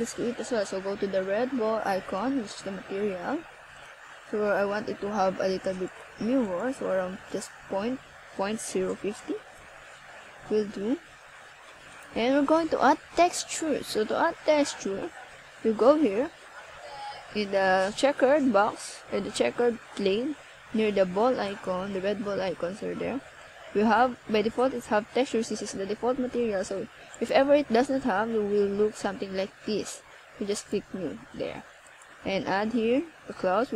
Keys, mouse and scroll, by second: 0.7 click.